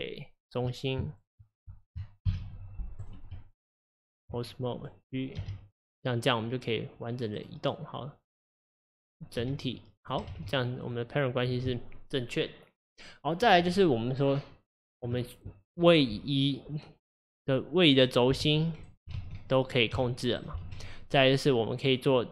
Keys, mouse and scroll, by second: 1.1 shift+click, 2.3 ctrl+p, 3.4 Tab, 4.8 click, 5.4 g, 8.6 click, 9.4 g, 10.3 ctrl+z, 10.9 click, 17.2 click, 18.4 g, 19.2 ctrl+z, 19.6 click, 20.0 g, 20.7 ctrl+z, 21.8 click.